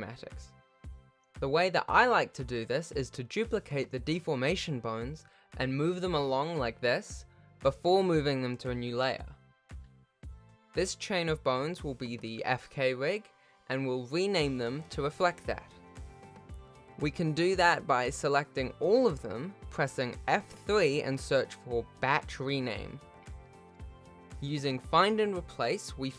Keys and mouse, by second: 0.8 shift+click, 1.2 Tab, 1.7 click, 2.3 shift+click, 2.9 shift+click, 4.2 shift+d, 8.8 shift+click, 9.7 shift+click, 10.7 m, 13.3 click, 14.0 shift+middle click, 14.9 click, 16.4 F2, 18.3 BackSpace, 20.3 shift+click, 21.2 F3.